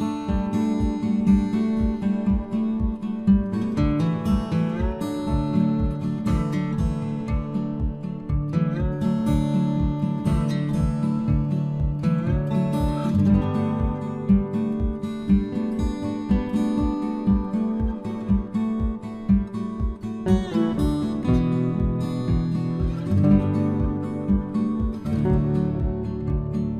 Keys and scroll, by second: 2.8 ctrl+c, 11.9 ctrl+v, 24.3 Delete, 25.7 ctrl+z.